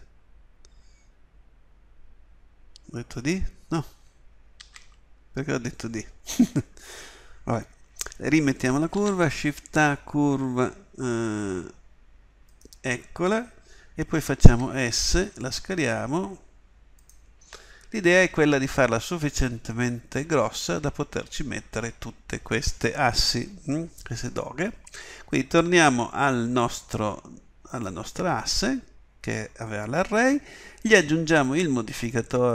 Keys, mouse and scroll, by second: 4.5 ctrl+z, 9.0 shift+a, 14.5 s, 18.3 s, 26.3-32.5 middle drag.